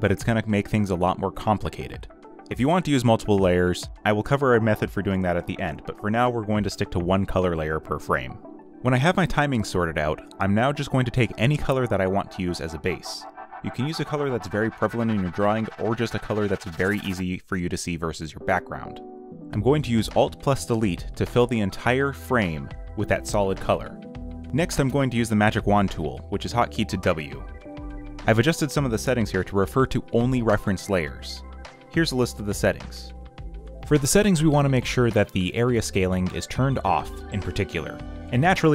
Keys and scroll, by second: 14.2 alt+Delete, 14.9 w, 20.6 w.